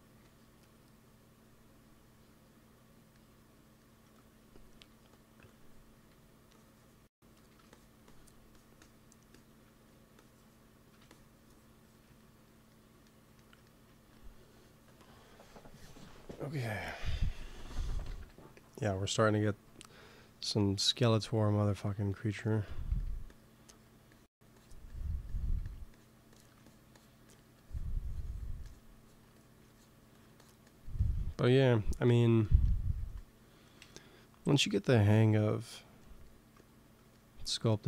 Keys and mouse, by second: 0.0 f, 0.6 click, 5.0-6.2 drag, 5.8 f, 6.3-13.6 drag, 7.2 f, 9.7 f, 13.8 ctrl+s, 14.7-16.5 drag, 18.0 KP_1, 20.5-21.9 middle drag, 22.8 f, 23.2-32.5 drag, 25.5 f, 32.8 ctrl+s, 33.7 KP_1.